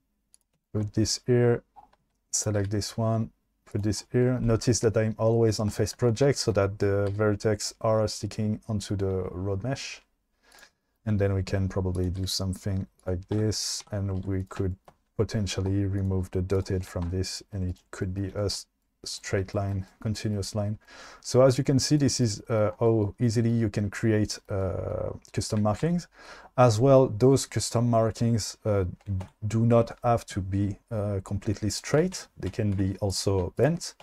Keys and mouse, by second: 2.7 g, 7.1 g, 10.5 click, 10.7 shift+middle click, 12.0 click, 12.2 g, 13.4 Tab, 13.9 Tab, 14.3 2, 17.1 Tab, 28.5 Tab, 31.7 Tab, 31.7 click, 32.2 Tab, 32.5 2, 32.8 1.